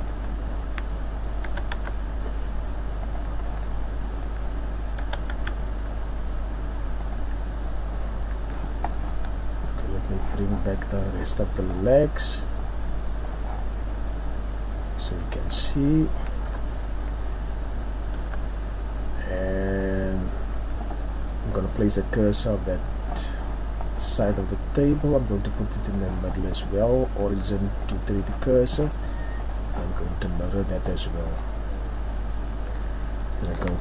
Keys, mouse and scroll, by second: 0.0 middle click, 0.6 scroll up 1, 1.4 s, 3.1 click, 3.4 middle click, 5.0 s, 7.1 click, 7.3 Tab, 7.9-8.3 scroll down 2, 8.3 Tab, 10.9 right click, 13.6 click, 14.2-14.8 scroll down 1, 14.8 middle click, 14.8 scroll down 1, 15.5 middle click, 15.5 scroll up 1, 16.5 KP_7, 17.3-18.1 scroll down 2, 18.2 z, 19.2 scroll up 1, 19.7 right click, 29.4 click.